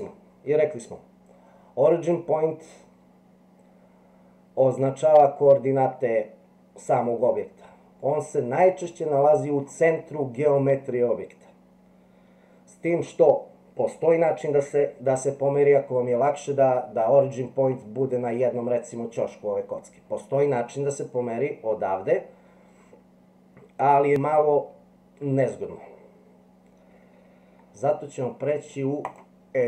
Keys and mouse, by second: 8.0-9.6 middle drag, 17.8-18.4 middle drag, 20.6-21.1 middle drag, 29.1-29.6 drag.